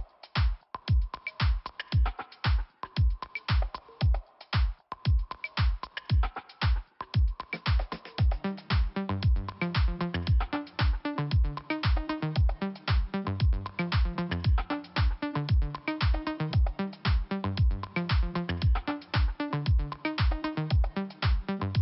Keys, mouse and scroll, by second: 7.3 click, 8.6 click, 13.3 f, 13.8-14.4 scroll down 1, 14.4 middle click, 15.4 scroll up 1, 15.7 middle click, 16.6 scroll up 2, 18.0 click, 21.5 click.